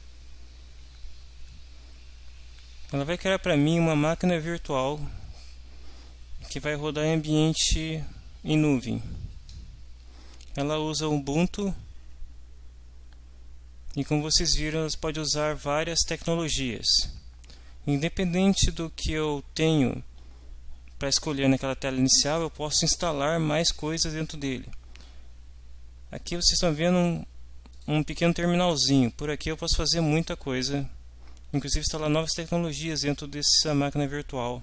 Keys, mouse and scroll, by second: 26.1 click, 27.0 click, 27.7 click, 30.1-31.7 drag.